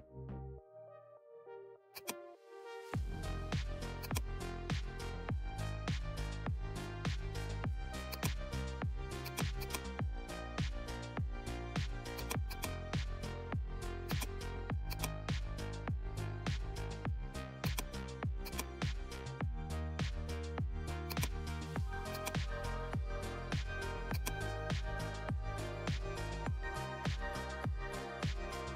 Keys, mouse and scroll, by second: 8.0-11.6 drag, 11.6 right click, 12.1 click, 12.1 click, 12.4 click, 13.0 right click, 14.0 click, 15.2 right click, 17.6-28.7 drag.